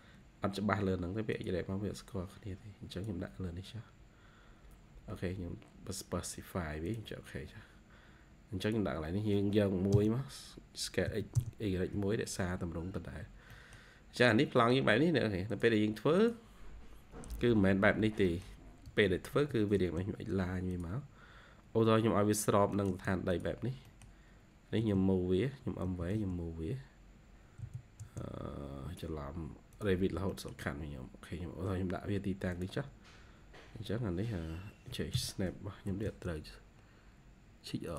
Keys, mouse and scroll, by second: 9.8 Return, 11.0 typing, 11.3 Return, 12.9-13.4 scroll up 3, 13.4 middle click, 14.1-14.5 scroll down 1, 14.5 middle click, 17.3 Escape, 17.5 Escape, 18.2 middle click, 18.8-19.2 typing, 22.6-23.3 typing, 23.8 middle click, 24.7 typing, 25.8-27.5 typing, 26.4-26.7 scroll up 1, 28.4 scroll up 1, 28.7 typing, 29.9 scroll down 1, 30.2 middle click, 32.9 scroll up 2, 35.0-35.8 typing.